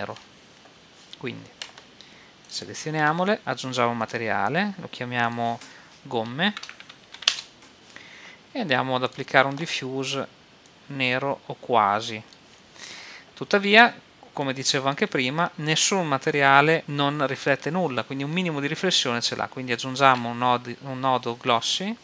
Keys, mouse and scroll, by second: 2.5 right click, 3.3-7.1 drag, 7.1 m, 9.9-10.9 drag, 14.5-16.8 drag, 20.0 shift+a.